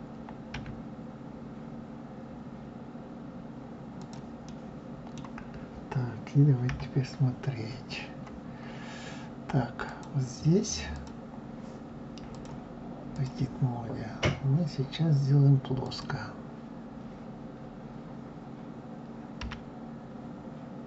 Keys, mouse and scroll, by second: 0.6 s, 4.4-6.6 middle drag, 6.6 KP_3, 7.7-9.3 scroll up 6, 9.9 click, 10.9 click, 12.3-15.4 drag, 15.8 click, 19.4 g.